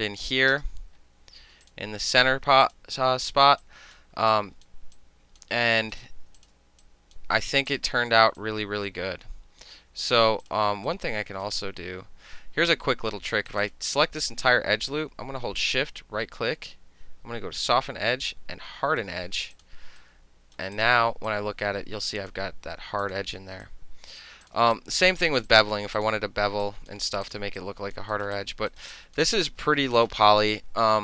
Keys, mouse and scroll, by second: 0.0 alt+click, 0.1 alt+middle click, 1.7 click, 2.7 click, 3.7 alt+click, 4.1 alt+middle click, 4.4 alt+click, 4.7 alt+middle click, 5.0 alt+click, 5.5 alt+middle drag, 5.9 alt+middle click, 6.0 alt+right click, 6.1 alt+middle click, 6.5 click, 6.5 alt+middle click, 6.9 alt+click, 7.2 alt+middle click, 7.8 click, 7.9 alt+middle click, 8.2 alt+right click, 8.5-10.3 alt+drag, 10.5 alt+click, 10.9-11.5 alt+right drag, 13.6 click, 13.7 click, 14.3 alt+click, 15.7-19.1 shift+right drag, 19.6 click, 20.1-20.6 right drag, 20.8 click, 21.4-22.4 alt+drag, 22.4 alt+middle click, 23.1 click, 23.2 middle click, 23.7 alt+click, 24.3 alt+middle click, 24.5 click, 24.8 alt+click, 25.2 alt+middle drag, 25.4 alt+right click, 25.5 alt+middle click, 25.6 alt+click, 25.8 alt+middle drag, 26.0 click, 26.1 middle click, 26.7 alt+click, 27.0 alt+middle click, 27.3 click, 27.4 alt+middle click, 27.7 alt+click, 28.0 alt+middle click, 28.2 alt+right click, 28.3 alt+middle click, 28.4 alt+click, 28.6 alt+middle click, 28.8 alt+right click, 28.9 alt+middle click, 29.0 alt+click, 29.2 alt+middle click, 29.4 alt+right click, 29.7 alt+middle click, 30.0 alt+right click, 30.6 alt+click.